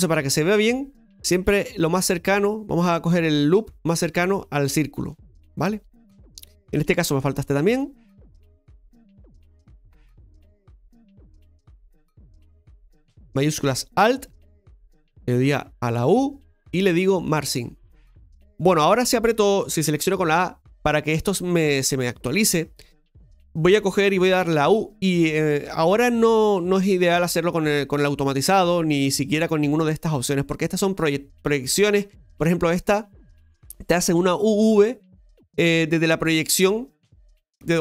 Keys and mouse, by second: 5.9-6.9 middle drag, 7.0 shift+middle click, 8.2 shift+middle click, 10.8 right click, 13.7 alt+shift+right click, 16.9 u, 18.5 middle click, 20.2 a.